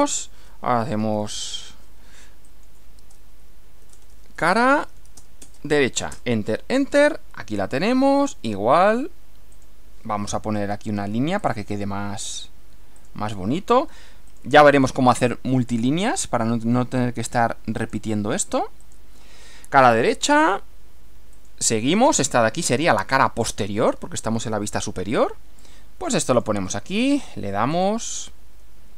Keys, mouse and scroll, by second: 0.8-1.7 typing, 2.4 click, 3.5-5.7 typing, 7.8 click, 8.8 click, 9.6 click, 11.4 click, 13.0 click, 14.3 click, 16.1 click, 17.8 click, 18.8 click, 21.4 click, 26.3 click, 27.7 click.